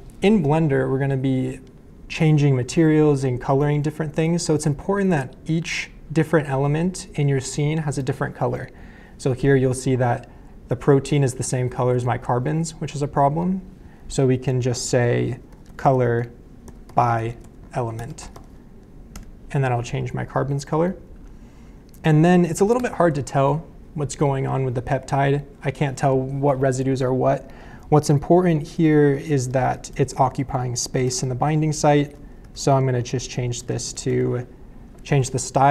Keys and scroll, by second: 15.2-18.8 typing, 19.1 Return, 22.8 BackSpace, 28.9-34.6 typing.